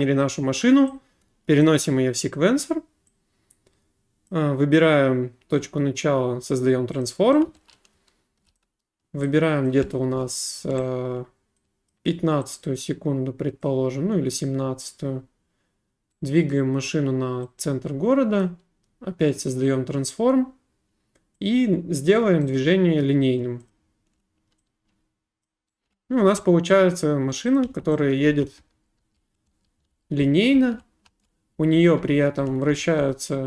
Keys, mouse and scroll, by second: 1.6 click, 4.3 click, 7.0 click, 7.3-9.0 typing, 8.6 right click, 9.7 click, 11.9 click, 13.7 click, 16.5 right click, 18.4 click, 19.6 click, 22.1 click, 22.6 right click, 23.7 click, 25.5 click, 25.7-26.5 typing, 26.7 right click, 27.6 click, 27.7-30.5 typing.